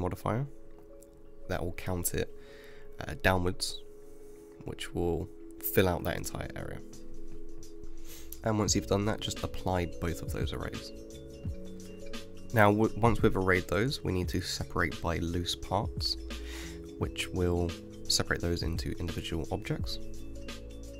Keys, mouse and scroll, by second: 0.9-3.9 drag, 5.5-7.8 drag, 11.0-12.3 drag, 12.3 scroll up 1, 12.4 Tab, 16.5 a, 19.9-20.9 drag.